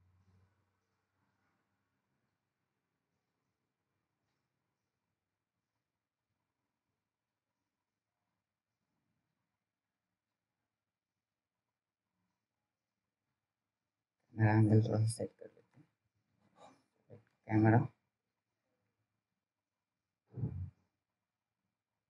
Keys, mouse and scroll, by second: 15.5 click, 20.5 middle click.